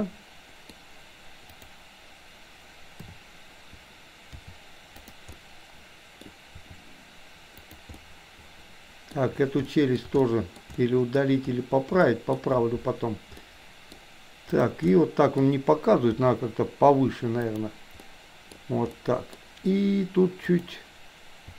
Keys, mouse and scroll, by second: 1.6 click, 2.9 KP_7, 4.3 r, 5.4-6.3 middle drag, 6.6 r, 7.9-9.1 middle drag, 9.7-10.1 middle drag, 10.2-10.6 shift+middle drag, 10.7-11.2 middle drag, 12.1 shift+middle click, 13.3-13.9 middle drag, 14.6 drag, 14.9 middle click, 16.1 r, 17.9-18.6 middle drag, 18.9-19.3 middle drag, 21.4 r.